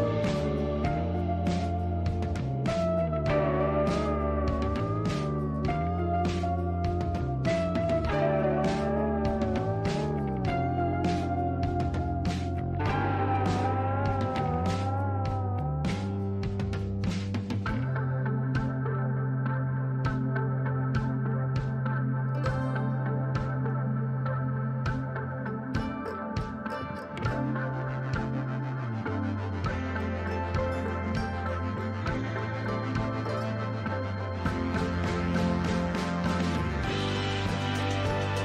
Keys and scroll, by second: 0.0 ctrl+e, 5.0 ctrl+t.